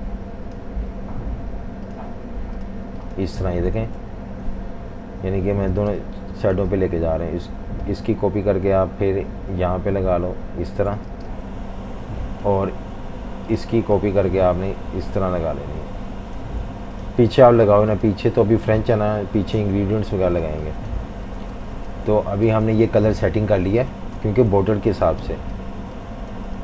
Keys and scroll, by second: 4.4 F18, 5.8-7.0 typing, 11.1-12.5 typing, 19.5 Delete, 20.2-23.0 typing, 24.2 super+-, 24.4 super+-, 24.5 super+-, 25.1-26.6 typing.